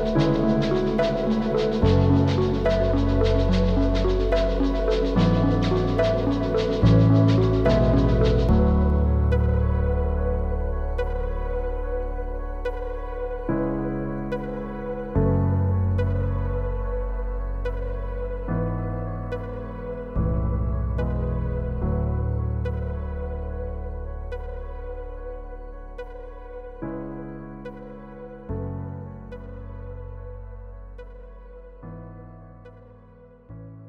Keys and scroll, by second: 3.1 b, 4.0 ], 6.3 v, 8.6 Return, 16.8 b, 21.6 [, 26.4 v.